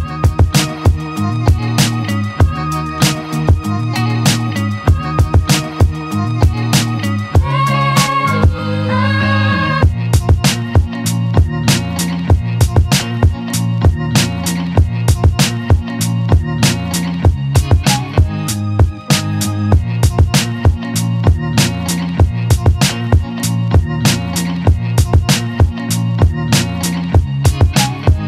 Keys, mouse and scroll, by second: 1.2 click, 1.4-2.5 right drag, 2.5-3.7 drag, 4.5 click, 5.4 click, 5.7 scroll down 1, 5.9 click, 6.5 click, 6.9-8.0 alt+drag, 8.0 alt+right click, 8.3-9.5 alt+drag, 11.4 click, 11.9 right click, 12.4 click, 12.6-13.1 alt+right drag, 13.1-14.1 alt+drag, 14.1 alt+middle drag, 14.3 alt+right click, 14.6 alt+middle click, 15.1 alt+right click, 15.8 click, 16.7-17.1 alt+drag, 17.1 alt+middle drag, 17.3 alt+right drag, 17.6 alt+click, 18.5 alt+click, 18.9 alt+middle click, 19.5 shift+click, 20.7 shift+click, 21.2 shift+click, 21.7 shift+click, 22.1 shift+click, 22.4 alt+middle click, 22.6 alt+click, 23.7 shift+click, 24.8 shift+click, 25.5 alt+middle click, 26.1 `, 26.6 scroll up 1, 27.7 right click.